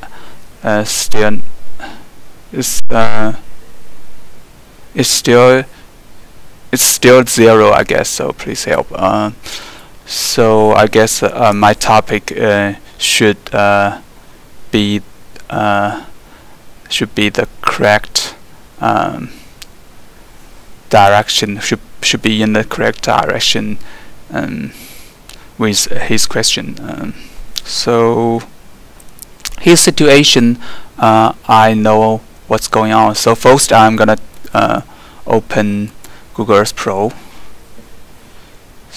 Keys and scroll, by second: 11.3 alt+3, 30.0 alt+2, 31.4 alt+1, 32.2 alt+2, 32.7 alt+1.